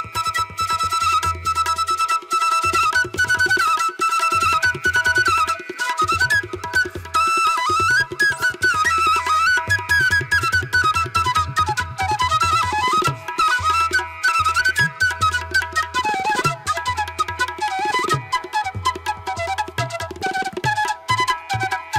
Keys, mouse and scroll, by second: 0.7 space, 1.3 ctrl+alt+z, 4.5 ctrl+=, 6.5 ctrl+-, 7.8 ctrl+alt+z, 9.5 space, 9.9 space, 10.6 space, 11.4 ctrl+alt+z, 12.9 ctrl+=, 13.2 ctrl+=, 14.9 ctrl+alt+z, 15.8 ctrl+alt+z, 19.5 space, 20.7 ctrl+alt+z, 21.7 ctrl+alt+z.